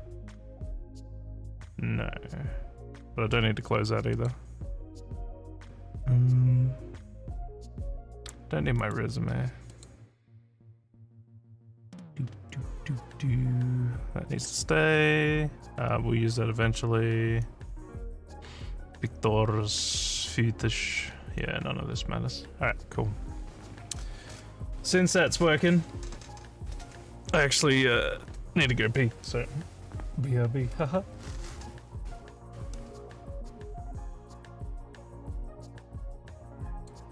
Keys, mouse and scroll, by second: 4.2 click, 8.8 right click, 9.7 click, 35.7 scroll up 1, 36.8 click.